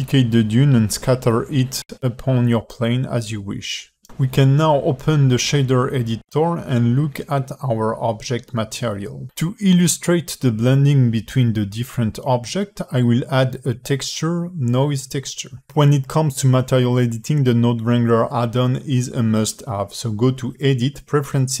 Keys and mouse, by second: 0.0-1.9 typing, 0.1 drag, 2.2 alt+middle drag, 2.6-2.9 alt+middle drag, 3.0 click, 3.2 shift+d, 4.1 g, 6.1-7.1 drag, 8.0 click, 10.0 click, 11.1 alt+shift+middle click, 11.9 click, 12.2 shift+a, 19.7-21.6 drag.